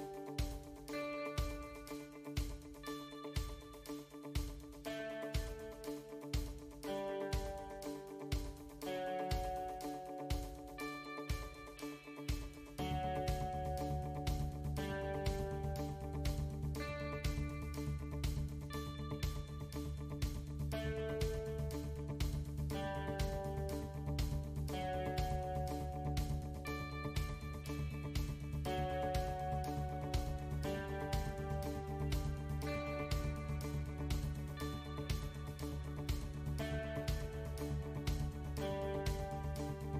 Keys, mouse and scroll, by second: 3.7 g, 7.4 alt+click, 8.7 g, 9.6 a, 9.6 s, 10.2 click, 10.6 shift+click, 11.7 click, 12.2 click, 13.7 g, 15.7 scroll down 1, 16.6 2, 17.4 alt+click, 18.2 KP_7, 18.9-19.6 scroll down 5, 19.6-20.5 scroll down 6, 20.5 s, 23.0 KP_1, 24.6 g, 30.0 middle click, 30.5 middle click, 31.5 s, 32.9 middle click, 34.5 e, 38.3-39.0 scroll up 3, 39.0 shift+middle click, 39.3-39.7 scroll up 4, 39.8 shift+middle click.